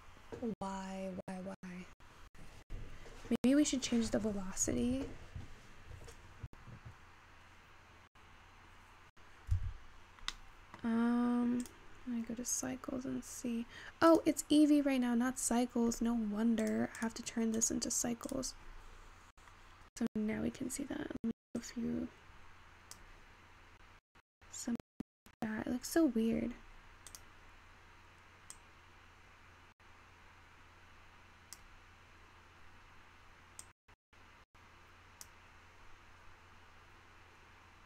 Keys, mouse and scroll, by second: 9.8 Escape, 10.4-12.5 middle drag, 12.5 click, 13.4-14.1 scroll up 3, 14.1 click, 15.5-16.2 scroll down 4, 16.2-17.7 scroll down 5, 17.7-19.8 drag, 19.8 scroll down 9, 20.0-20.6 scroll up 3, 20.6-21.4 scroll up 3, 23.2-25.5 drag, 29.6-33.2 drag, 34.1-37.8 drag.